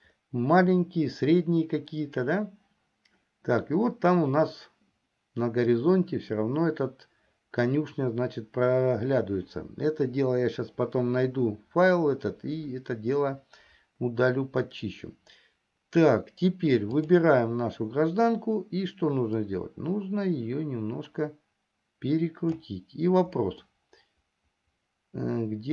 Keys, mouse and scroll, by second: 17.2 click, 20.0-23.3 drag, 24.3-25.7 middle drag.